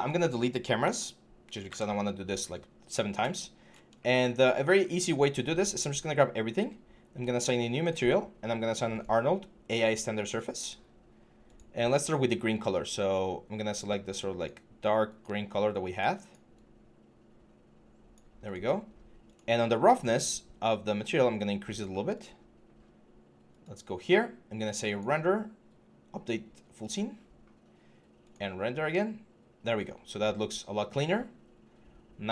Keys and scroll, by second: 0.6 Delete.